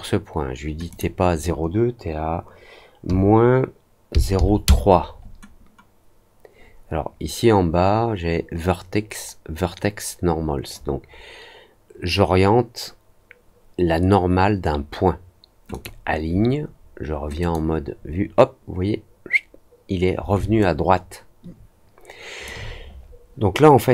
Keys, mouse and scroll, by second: 0.8 click, 15.6 click, 17.3 click, 20.5-22.4 alt+drag.